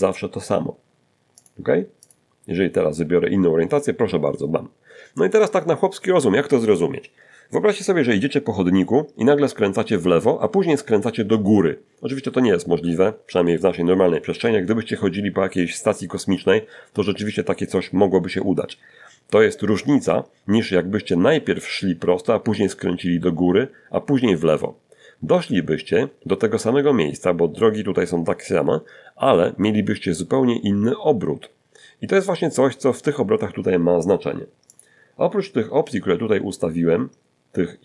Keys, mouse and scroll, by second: 0.2 click, 32.9 click.